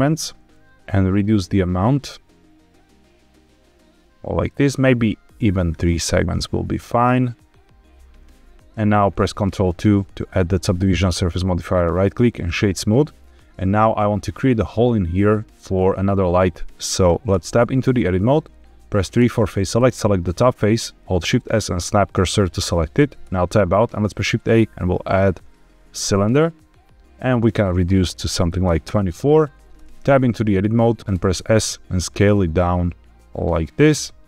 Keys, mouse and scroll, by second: 0.4-4.4 shift+drag, 5.6 click, 9.7 ctrl+2, 11.7-12.4 right drag, 17.2 Tab, 19.1 3, 19.7 click, 21.1 shift+s, 23.1 Tab, 23.9 shift+a, 27.3-28.8 drag, 29.7 Tab, 31.0 Tab, 31.0 Escape, 31.0 s, 31.2 s, 33.7 click.